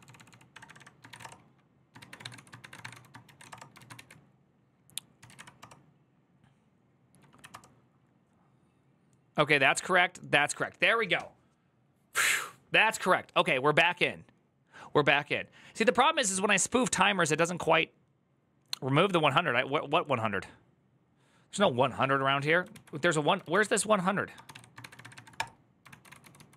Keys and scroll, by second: 0.0-5.5 typing, 7.2 Up, 7.3 Return, 15.7 alt++, 22.6 alt+{, 23.2 ctrl+a, 23.4-26.3 typing.